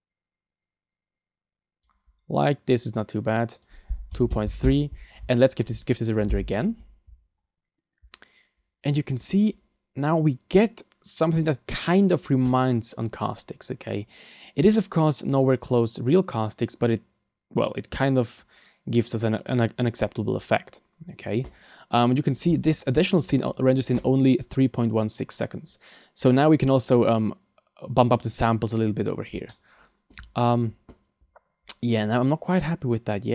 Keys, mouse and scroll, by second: 3.5 click, 5.4 shift+middle click.